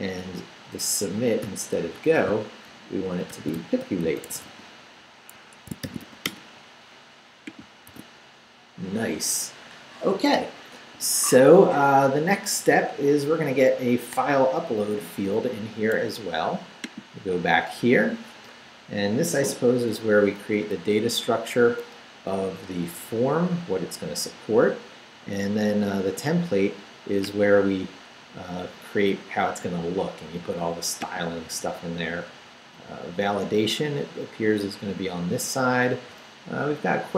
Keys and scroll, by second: 0.4 Left, 1.4-6.5 typing, 5.3 Escape, 7.9 super+r, 20.2 Up, 20.6 Down.